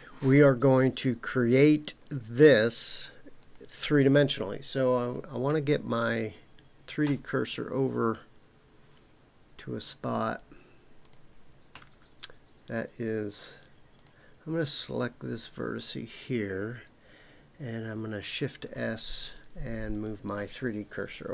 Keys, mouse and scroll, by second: 3.4 click, 7.0 Tab, 11.0 click, 13.9 click, 18.6 shift+s.